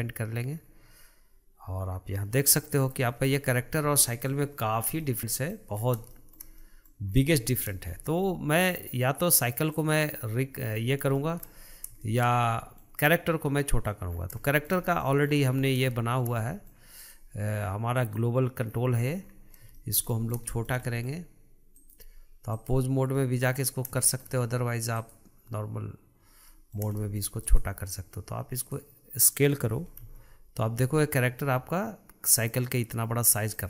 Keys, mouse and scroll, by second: 0.6-2.5 scroll down 1, 2.5-3.1 middle drag, 3.1-4.0 scroll down 6, 4.0-4.6 shift+middle drag, 4.6-5.1 scroll down 1, 5.1-6.0 shift+middle drag, 6.0 scroll up 3, 6.3-7.3 shift+middle drag, 7.3-7.6 scroll up 2, 7.6-8.0 shift+middle drag, 8.0-9.9 scroll up 4, 9.9 click, 10.4-11.3 scroll down 5, 11.3-11.8 shift+middle drag, 12.2-14.3 shift+middle drag, 14.3-14.7 scroll up 3, 14.7-15.4 shift+middle drag, 15.4-16.1 scroll up 6, 16.1-17.1 shift+middle drag, 17.1 click, 18.1 click, 18.8-19.9 scroll down 11, 19.9-21.9 shift+middle drag, 21.9-23.3 drag, 23.3-25.1 middle drag, 25.1-26.7 drag, 26.7-27.6 middle drag, 27.6 click, 28.8 click, 30.2 s.